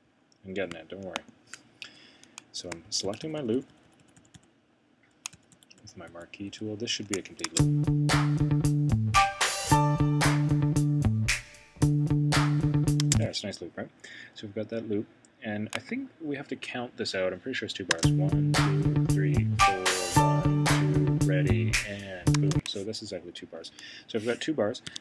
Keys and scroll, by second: 1.8 Right, 2.8 shift+Right, 24.9 Escape.